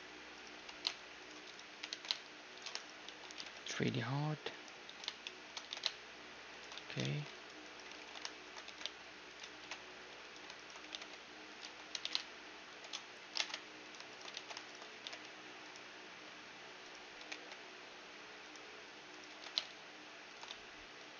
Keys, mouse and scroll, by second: 0.6 g, 1.7 g, 3.1 z, 3.3 g, 4.9 z, 5.2-7.2 middle drag, 5.6 g, 6.7 z, 7.0 ctrl+r, 8.0 ctrl+z, 8.7 g, 9.5 ctrl+b, 10.6-12.5 right drag, 10.8 g, 11.7 z, 12.0 g, 13.4 ctrl+Tab, 14.1-16.6 right drag, 14.4 ctrl+x, 14.9 g, 16.2 z, 16.6 z, 16.8-18.7 right drag, 17.2 g, 19.2-21.1 right drag, 19.3 g, 20.5 z, 20.8-21.1 middle drag.